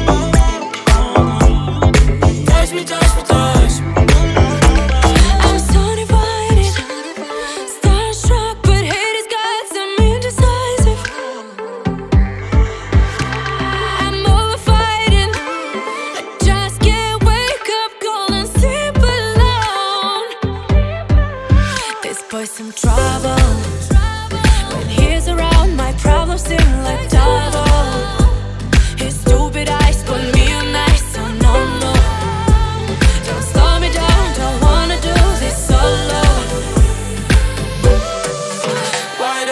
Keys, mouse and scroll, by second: 0.9 shift+d, 2.7 drag, 4.4 click, 5.9 click, 7.5-8.7 drag, 9.5 click, 10.4-12.5 drag, 12.9 click, 13.8 click, 15.3 click, 16.1-22.0 drag, 22.7 click, 24.0-28.9 drag, 28.9 middle click, 29.7 click, 30.0 click, 30.3 click, 31.1-31.6 scroll down 1, 31.6-32.4 middle drag, 32.4 click, 32.8 click, 33.7 ctrl+s, 34.2-35.6 middle drag, 35.6 click, 36.3 ctrl+a.